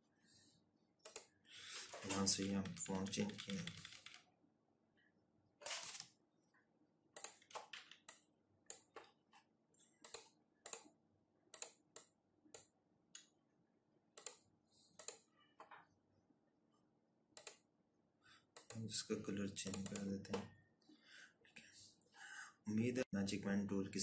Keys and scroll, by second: 1.9 Down, 2.1 Down, 2.4 Down, 2.6 Down, 2.8 Down, 3.0 Down, 3.2 Down, 3.4 Down, 3.5 Down, 7.3 z.